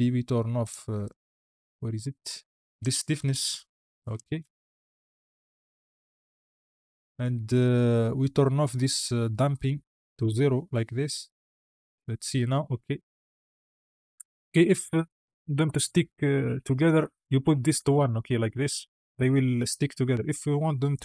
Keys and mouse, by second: 0.9 click, 2.6 click, 3.8 click, 4.1 space, 5.3 space, 7.4-10.1 drag, 11.3 space, 14.3 space, 14.7 click, 17.0 click, 18.3 space, 19.9 space, 20.8-21.0 drag.